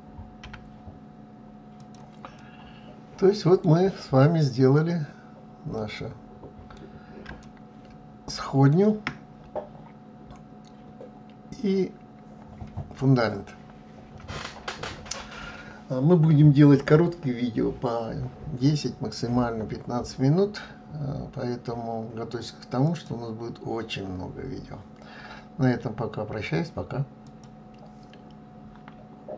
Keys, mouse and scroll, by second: 1.9-3.6 middle drag, 3.6 scroll up 2, 5.3-9.3 middle drag, 9.3-11.5 scroll down 1, 22.3 click.